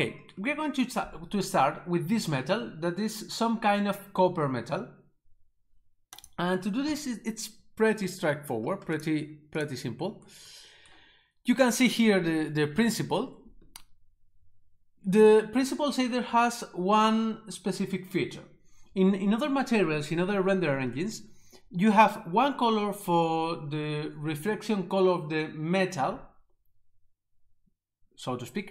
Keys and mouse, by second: 6.2 click, 6.8 Delete, 8.9 click.